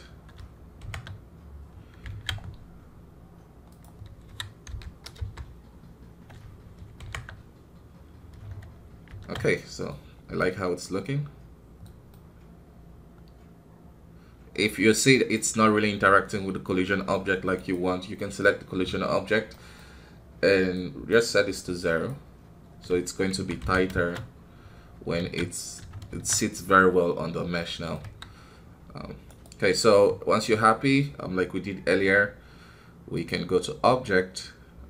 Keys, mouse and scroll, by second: 0.8 shift+Left, 2.1 alt+a, 2.5 scroll down 1, 3.7-7.0 drag, 7.0 shift+Left, 9.0 shift+space, 9.5 middle click, 9.9 scroll up 2, 10.3-14.6 middle drag, 14.6 scroll up 2, 15.3-17.5 middle drag, 17.5 right click, 18.1 middle click, 19.1-19.5 scroll down 3, 19.5-21.5 middle drag, 21.5-22.6 drag, 22.6-23.3 scroll up 2, 23.3 shift+Down, 23.6 shift+Left, 23.9 shift+space, 25.2 alt+a, 26.1 shift+space, 26.3-28.0 middle drag, 28.0 KP_1, 28.7-29.2 scroll down 1, 29.2 right click, 29.8 q, 33.1-34.8 drag.